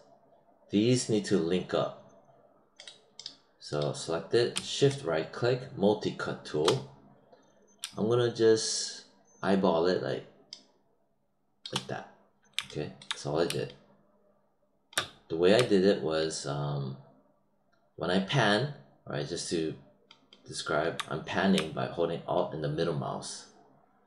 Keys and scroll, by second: 13.4 space.